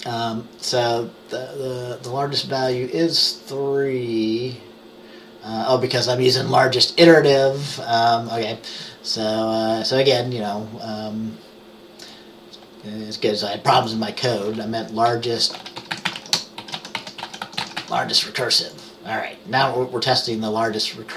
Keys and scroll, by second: 15.3-18.4 typing.